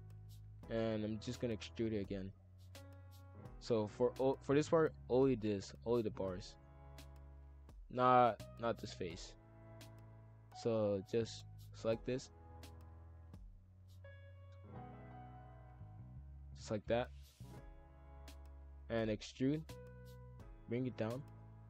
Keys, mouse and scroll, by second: 0.8-1.8 drag, 2.2 shift+f, 5.4 shift+click, 5.6 shift+f, 6.8 shift+f, 8.4 shift+click, 9.4 shift+f, 12.3 shift+click, 12.8 shift+f, 14.3 shift+click, 14.9 shift+click, 15.2 shift+f, 16.6 shift+click, 16.8 shift+f, 19.6 shift+d, 20.6 click, 21.5 shift+f.